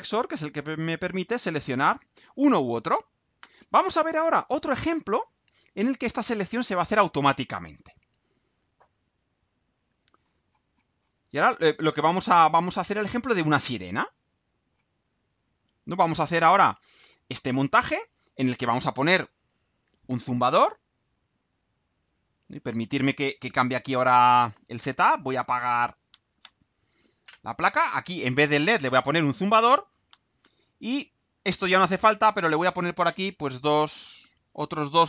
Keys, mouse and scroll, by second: 7.7 click, 9.7 click, 10.2-11.2 scroll down 2, 11.5-13.4 scroll down 6, 13.7-14.4 scroll down 4, 14.7-15.7 scroll down 4, 15.9-16.2 scroll down 4, 21.3 click.